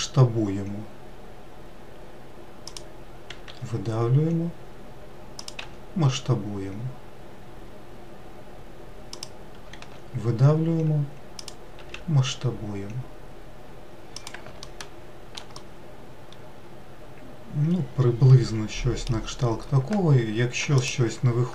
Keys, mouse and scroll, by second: 3.7 e, 5.9 s, 10.1 e, 12.0 s, 14.9 alt+middle click, 15.8-18.8 middle drag, 21.0 alt+click.